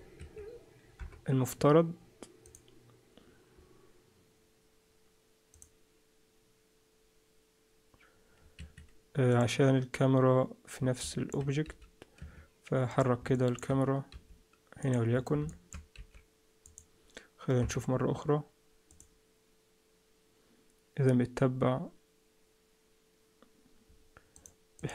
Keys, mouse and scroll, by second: 0.2 Escape, 0.9 KP_0, 2.4 click, 9.3 Escape, 9.3 click, 11.0 middle click, 11.6 g, 12.9 click, 13.3 shift+middle click, 14.1 g, 15.1-15.6 scroll down 5, 15.5 shift+middle click, 15.9 g, 17.6 KP_0, 18.9 click, 24.3 click, 24.7 click.